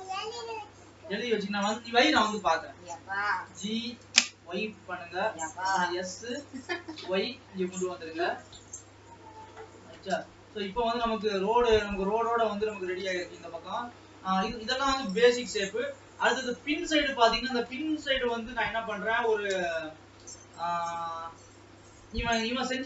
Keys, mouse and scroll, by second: 0.5 scroll down 2, 0.7-1.7 middle drag, 1.7 KP_7, 2.8 shift+middle click, 3.2 shift+scroll up 1, 3.5 g, 5.6 s, 8.9 scroll up 2, 9.3-10.1 scroll down 1, 10.1 KP_0, 11.1 alt+a, 11.7 Tab, 12.1-14.4 middle drag, 14.4 ctrl+s, 14.9-15.6 scroll down 1, 15.6-18.1 middle drag, 18.1-18.4 scroll down 2, 18.4-21.4 middle drag, 21.4-22.0 scroll up 2, 22.0-22.8 scroll down 1.